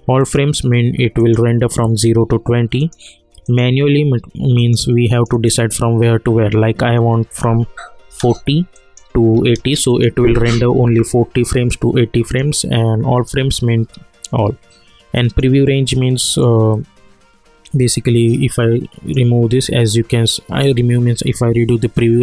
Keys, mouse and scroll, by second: 0.2-8.7 drag, 12.3 click, 12.3-21.5 drag.